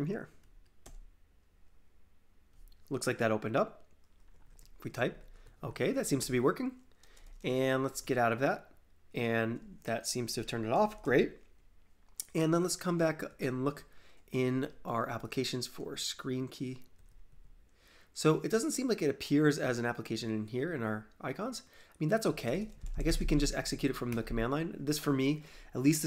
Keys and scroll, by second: 4.1-7.6 typing, 7.8 ctrl+c.